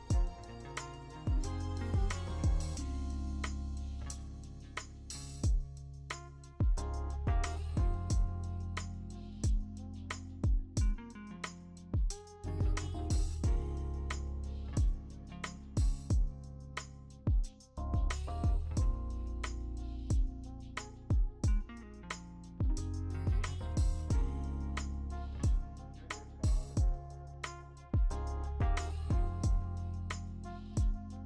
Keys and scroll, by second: 1.2 Return, 2.2-2.6 scroll, 4.6-9.2 typing, 14.4 v, 17.8 ctrl+z, 19.8 b, 20.5 0, 26.4 Return, 29.1 ctrl+g, 29.6-30.4 typing.